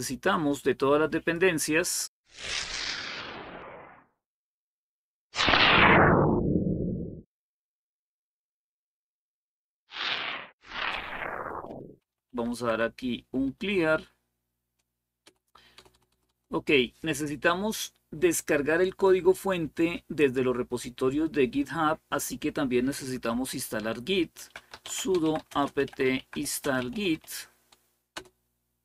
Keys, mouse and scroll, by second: 1.6-11.4 drag, 11.5-13.0 typing, 15.0 Return, 15.5 Return, 15.7 Return, 15.9 Return, 23.9-27.4 typing, 28.0 Return.